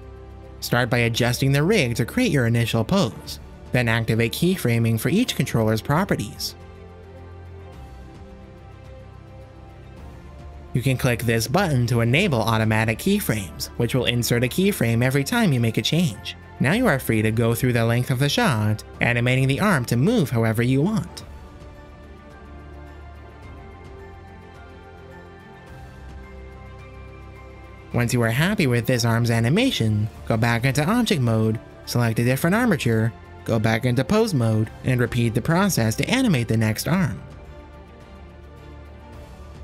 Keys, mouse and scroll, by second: 2.1 click, 2.3 r, 3.1 middle drag, 4.2 click, 4.6 shift+click, 6.4 click, 6.6 shift+click, 6.8 shift+click, 7.1 shift+click, 9.1 click, 9.3 click, 9.8-10.8 scroll up 1, 12.4 click, 12.8 KP_0, 13.1-15.1 drag, 15.6-16.0 middle drag, 16.2 shift+middle drag, 16.6 r, 17.2 middle click, 17.4 middle click, 17.7-19.0 typing, 18.1 shift+click, 18.2 click, 20.0-21.2 typing, 21.1 click, 21.6-22.0 drag, 22.0 click, 22.4 click, 22.4 shift+click, 22.6 middle click, 23.1 click, 23.6 r, 23.8 r, 23.9 click, 24.1 KP_0, 24.3-25.1 drag, 28.3-30.0 drag, 30.9 click, 32.7-33.2 shift+drag, 34.0-34.8 drag, 35.3 click, 35.7-39.6 typing, 36.5 drag, 37.1 shift+click, 37.4 shift+click, 38.0 drag, 38.6 shift+click.